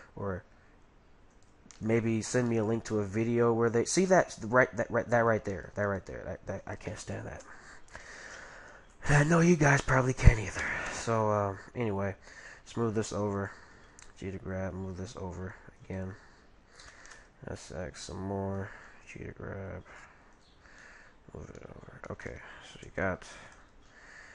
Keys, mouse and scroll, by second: 1.8-3.0 middle drag, 3.1-4.5 middle drag, 4.2-8.1 right drag, 8.4 middle click, 9.1 middle click, 10.5 s, 11.4 middle click, 13.8 g, 16.8 s, 18.9 g, 20.8-24.3 middle drag.